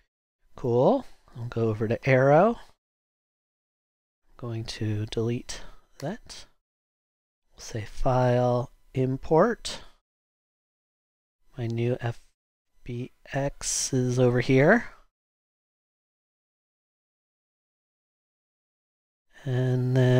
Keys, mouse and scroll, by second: 0.6 super+Tab, 1.3 super+Tab, 6.0 BackSpace, 6.0 BackSpace.